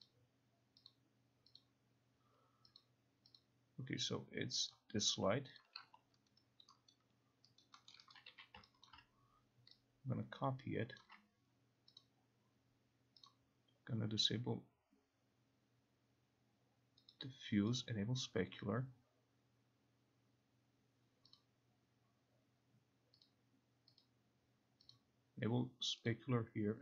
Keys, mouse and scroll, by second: 0.2 click, 1.0 click, 1.7 click, 2.9 click, 3.5 click, 4.8 click, 5.7 click, 6.4 alt+right click, 7.7 alt+right click, 8.0 alt+middle click, 8.2 alt+right click, 8.4 e, 9.0 alt+click, 11.1 ctrl+click, 12.1 click, 13.4 click, 17.2 click, 18.4 click, 21.4 click, 23.3 click, 24.2 click, 25.0 click, 26.2 click.